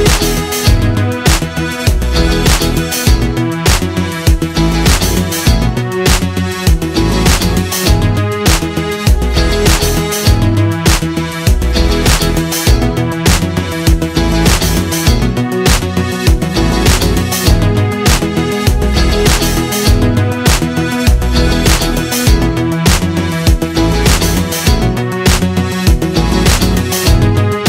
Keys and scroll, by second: 0.0-8.7 typing, 3.2 ctrl+d, 11.9 Down, 12.0 Right, 14.6 Delete, 16.4 Delete, 16.9 z, 17.1 space, 17.3 a, 19.0 Delete, 19.7 z, 20.0 space, 20.8 a, 22.6 Delete, 23.2 space, 24.6 v, 25.2 i, 25.7 v, 26.5 ctrl+z.